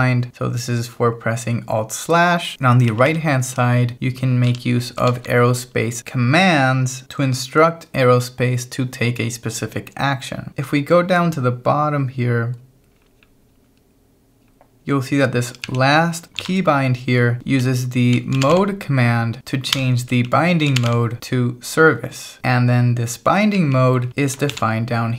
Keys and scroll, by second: 2.5 Escape, 2.7 l, 4.4 v, 5.1 shift+4, 10.6-16.4 typing, 17.4 Escape, 17.6-19.0 typing, 19.8 Escape, 20.3 l, 21.0 w, 22.4 Escape, 23.6 j, 24.5 shift+v.